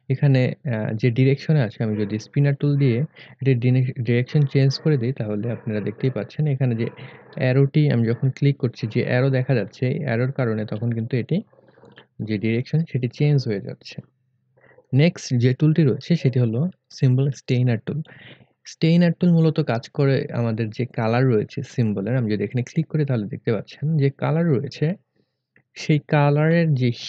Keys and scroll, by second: 10.7 1.